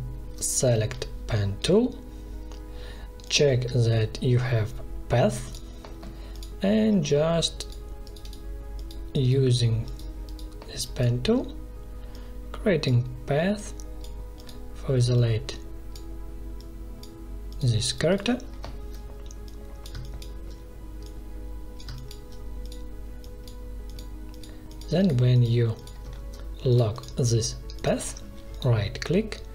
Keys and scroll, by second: 0.6 p, 19.9 space, 21.7 space.